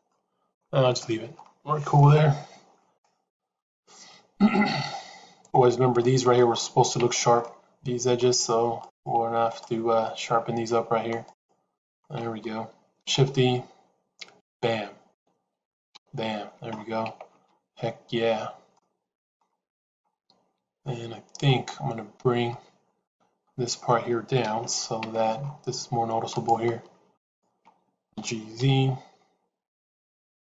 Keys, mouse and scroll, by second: 0.1 middle click, 0.8 Tab, 1.8-5.4 middle drag, 5.8 middle click, 6.9 Tab, 7.3 middle click, 10.0 middle click, 12.0 middle click, 12.9 shift+e, 15.0 KP_1, 15.8 KP_3, 17.0 Tab, 18.6 middle click, 20.7 shift+middle click, 23.0 KP_3, 24.3 KP_Decimal, 25.0 Tab, 26.2 click, 28.0 g.